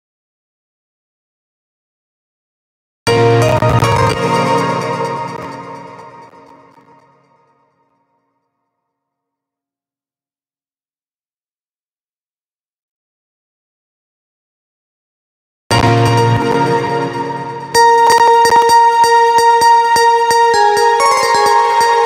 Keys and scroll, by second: 15.1 space.